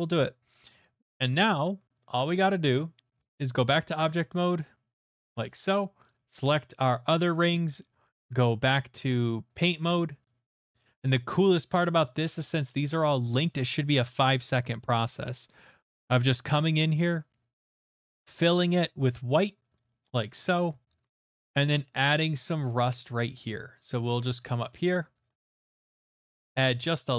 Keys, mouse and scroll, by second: 3.2 click, 3.6 click, 5.1 click, 5.4 click, 7.1 click, 9.5 click, 10.8 click, 11.4 click, 11.9 shift+middle click, 12.1 middle click, 12.2 middle click, 12.2 shift+middle click, 13.0 middle click, 17.6 middle click, 18.1 click, 19.7 click, 21.4 middle click, 21.9 shift+middle click, 22.2 middle click, 22.2 middle click, 22.3 shift+middle click, 22.6 shift+middle click, 24.7 click, 25.2 click, 25.5 click, 25.7 middle click, 26.0 click, 26.2 click, 26.4 middle click, 26.8 shift+middle click.